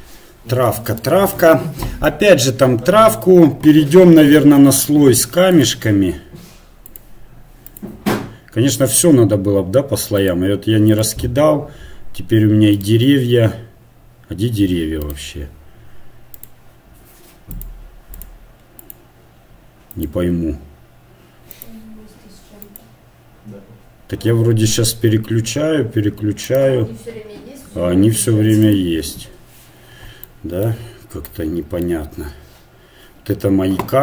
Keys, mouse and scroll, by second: 5.6-34.0 drag.